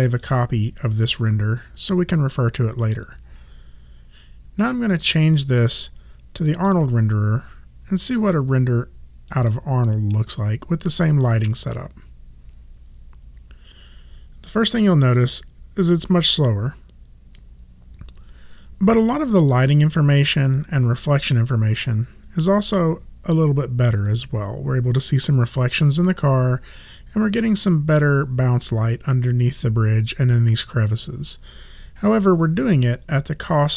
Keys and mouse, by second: 0.0 click, 4.2 click, 5.5 click, 9.3 click.